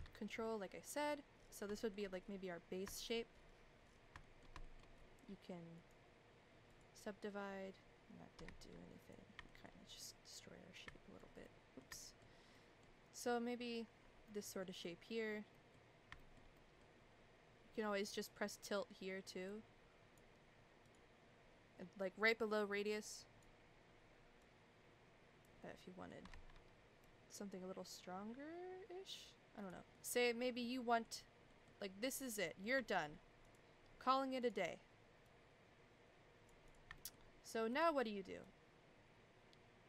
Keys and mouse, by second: 1.7 shift+middle click, 2.9 shift+middle click, 4.2 shift+middle click, 4.6 shift+middle click, 5.8 right click, 8.4 ctrl+z, 9.0 click, 9.5 shift+middle click, 10.0-11.2 middle drag, 11.4 middle click, 12.0 shift+middle click, 12.5 middle click, 14.2 middle click, 14.8 middle click, 15.5 middle click, 16.1 shift+middle click, 16.5 middle click, 18.0 click, 19.4-20.1 drag, 22.9-23.4 drag, 24.4 click, 25.6 middle click, 26.3 ctrl+z, 27.0 click, 29.9 middle click, 30.6 middle click, 31.5 middle click, 32.4 middle click, 32.8 shift+middle click, 34.4 click, 35.3 click, 37.0 shift+middle click, 37.7 click, 38.5 click.